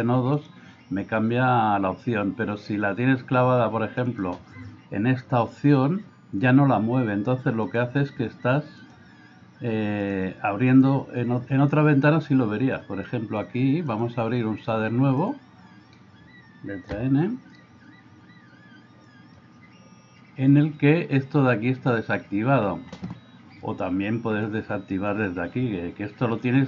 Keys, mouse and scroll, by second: 0.1 click, 8.8 click, 10.1 click, 12.3-13.4 drag, 14.1-15.3 drag, 16.9 n, 19.1 click, 24.4 click.